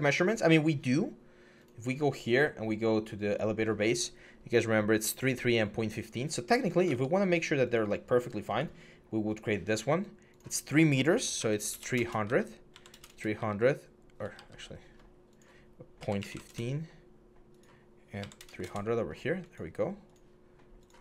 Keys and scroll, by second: 7.5 alt+Tab, 11.1-12.9 typing, 12.0 Tab, 13.1 Tab, 14.1 ctrl+z, 15.1 Tab, 15.5-16.2 typing, 16.2 Return, 17.7-18.5 typing.